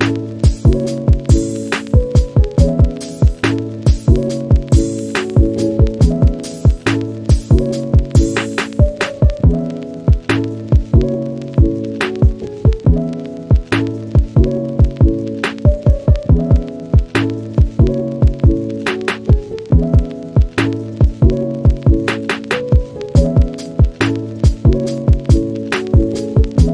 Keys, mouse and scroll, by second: 3.1 click, 8.7 click, 8.9 shift+middle drag, 9.2 click, 10.0 click, 10.5 h, 10.7-12.2 middle drag, 12.7 scroll up 1, 12.8 scroll down 2, 13.0-16.1 middle drag, 16.2 scroll down 2, 16.4 click, 18.1 scroll down 1, 18.3 click, 22.9 scroll up 3, 23.3-24.0 middle drag, 24.0 scroll up 1, 24.3 click, 25.1-25.5 scroll down 1, 25.5 click.